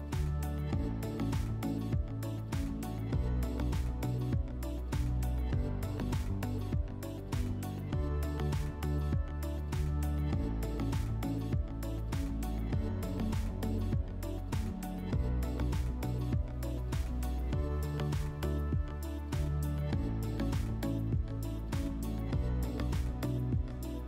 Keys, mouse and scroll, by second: 1.0 click, 1.7 click, 2.7 click, 6.3 click, 8.0 click, 8.1 click, 8.7-9.5 typing, 10.4 click, 10.5 click, 10.8-12.5 typing, 14.0 typing, 15.3 click, 19.9 click.